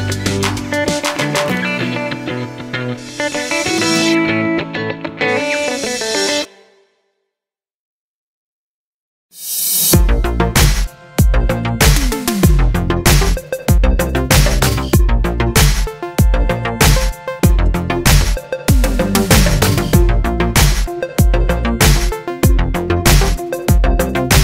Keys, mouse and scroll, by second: 0.1-10.0 middle drag, 1.1 Tab, 7.6 KP_Enter, 8.0 ctrl+a, 10.0-12.5 drag, 11.3 g, 12.7-14.1 middle drag, 13.2 r, 14.1 click, 14.4 g, 15.4 click, 15.8 s, 17.3 click, 17.4-18.1 scroll up 2, 17.6-20.9 shift+middle drag, 20.1 r, 20.9 click, 21.2 g, 22.3 click, 22.4 scroll down 1, 23.4-23.8 scroll down 1.